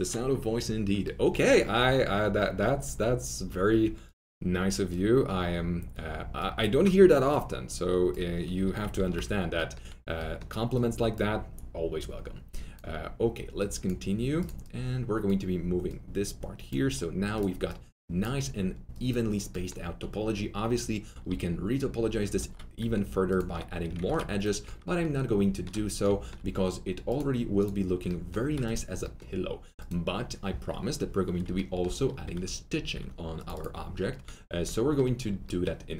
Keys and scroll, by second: 3.0-3.6 typing, 8.5 F3, 8.9 alt+q, 21.2 2, 22.3 alt+1, 24.0 ctrl+shift+z, 32.2 alt+2, 34.5 alt+2.